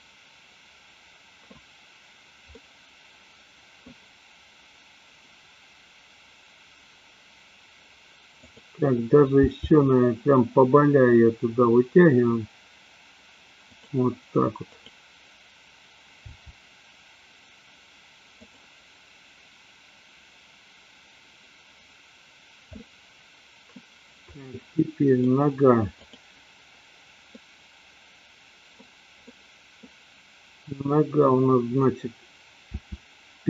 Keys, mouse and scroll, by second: 2.5-3.9 middle drag, 8.3 click, 9.3 g, 16.4 g, 22.8-23.8 middle drag, 24.3-25.3 middle drag, 26.0 click, 27.3-28.9 middle drag, 29.3 middle click, 32.7 r.